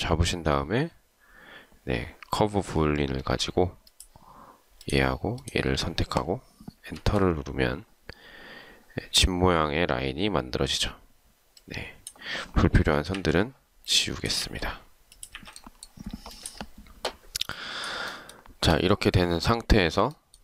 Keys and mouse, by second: 7.1 Return, 13.3 Delete, 14.5 Delete.